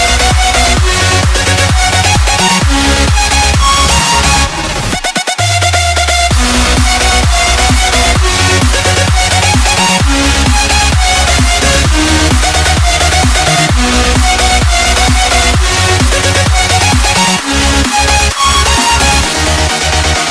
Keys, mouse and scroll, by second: 4.6 alt+click.